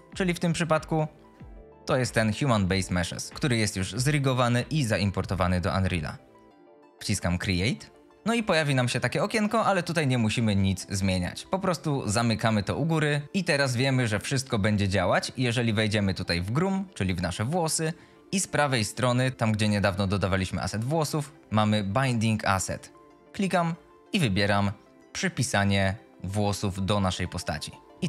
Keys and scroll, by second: 8.1 F22, 19.1 F22.